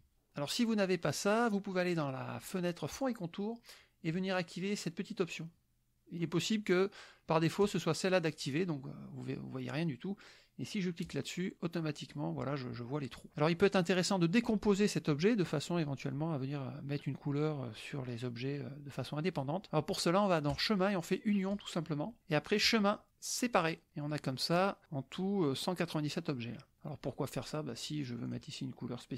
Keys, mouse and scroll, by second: 2.9 click, 7.6 click, 11.1 click, 11.8 middle click, 13.3 middle click, 20.6 click, 21.6 click, 22.7 click, 23.6 click, 24.0 click, 27.9 click, 28.3 click.